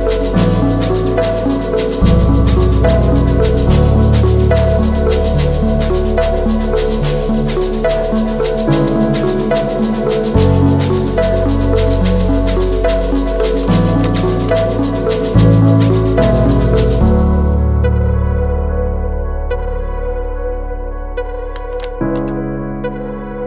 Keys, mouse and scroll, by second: 0.6 Down, 0.7 Down, 2.0 ctrl+t, 2.8 alt+shift+click, 4.7 Return, 5.3 Down, 5.5 Down, 5.6 Down, 5.7 Down, 5.9 Down, 6.3 Down, 6.5 Left, 6.7 Left, 7.0 Up, 7.5 Left, 8.5 Down, 9.4 Left, 9.6 Left, 20.5 ctrl+t.